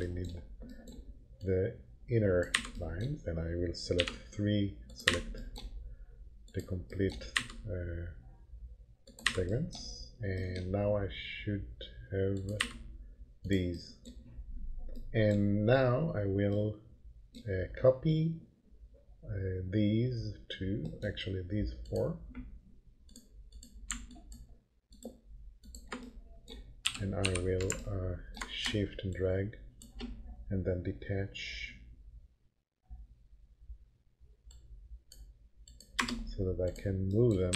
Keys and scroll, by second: 2.5 Delete, 4.0 3, 5.0 Delete, 7.3 Delete, 9.3 Delete, 12.6 Delete, 26.8 p, 27.2 f, 36.0 Return, 37.3-37.5 typing.